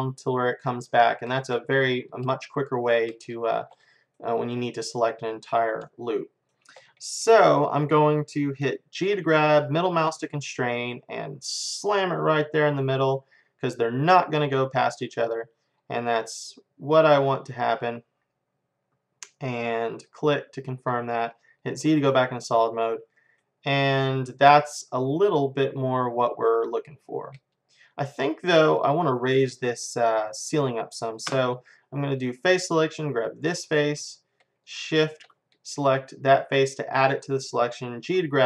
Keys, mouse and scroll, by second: 1.0-5.1 middle drag, 5.3-6.9 middle drag, 9.1 g, 21.7 z, 23.3 middle click, 24.2 middle click, 24.5-26.2 middle drag, 26.7-31.7 middle drag, 31.3 space, 33.6-36.6 drag, 36.6-38.4 middle drag, 38.1 g.